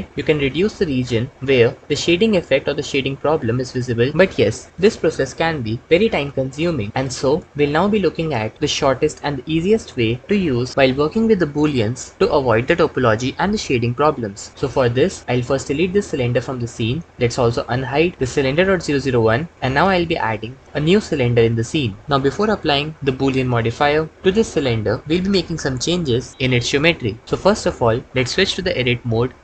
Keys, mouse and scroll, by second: 0.4 g, 0.6 g, 15.2 Tab, 15.8 x, 19.6 shift+a, 27.2 Tab.